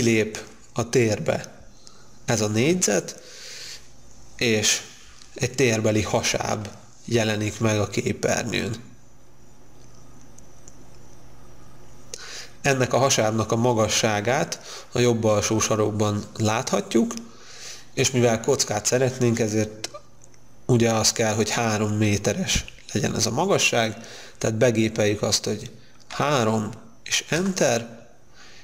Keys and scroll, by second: 26.3 3, 27.5 Return.